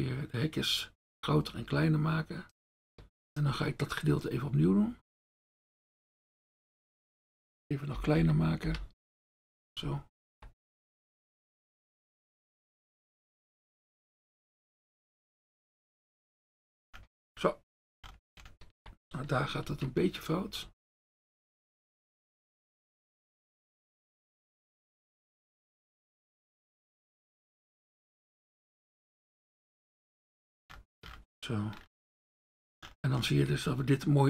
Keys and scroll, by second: 8.2 [, 8.7 [, 19.7 ctrl+alt+z.